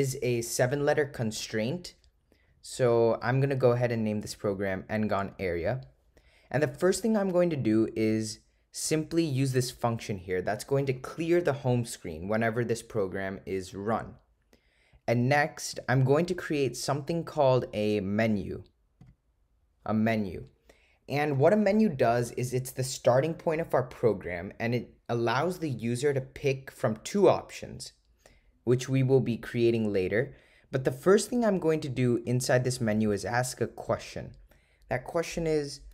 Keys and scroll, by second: 5.4 Return, 7.8 Right, 9.5 8, 10.9 Return.